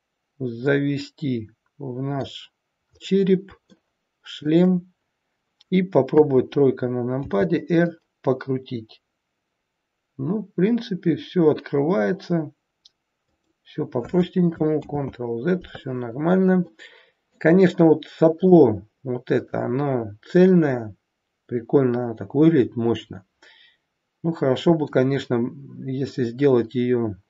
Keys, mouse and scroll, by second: 2.8-3.4 scroll up 2, 3.4 scroll up 1, 3.7 shift+middle click, 5.9 KP_3, 7.2 r, 16.0-16.6 scroll down 2, 16.7 middle click, 18.5 middle click.